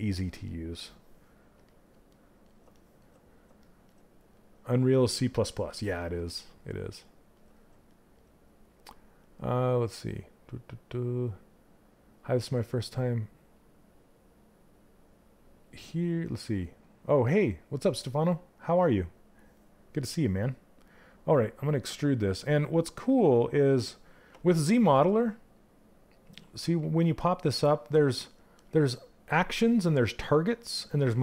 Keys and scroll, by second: 23.8 space, 26.3 space.